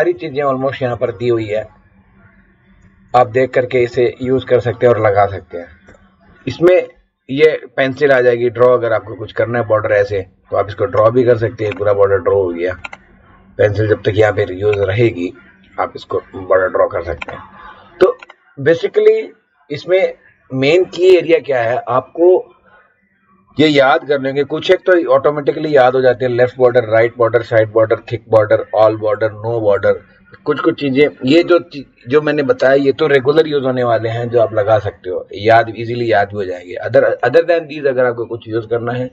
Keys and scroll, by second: 0.1 Up, 0.9 Down, 1.6 Up, 2.8 Down, 3.8 Up, 5.8 Return.